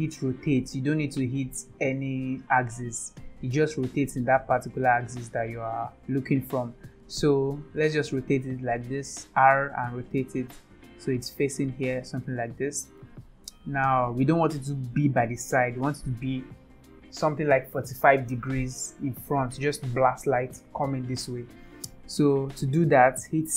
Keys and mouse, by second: 0.4 r, 13.0-14.3 middle drag.